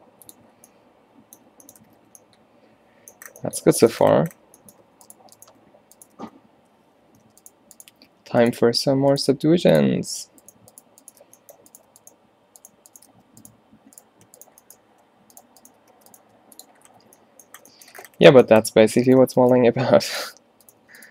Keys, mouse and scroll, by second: 0.9 middle click, 2.4 a, 6.3 alt+w, 7.1 ctrl+z, 9.0 alt+w, 9.4 g, 10.6 shift+right click, 11.3 f, 13.2 f, 16.0 f, 16.3 g, 16.9 middle click, 16.9 a, 17.1 a, 19.6 g, 20.9 g.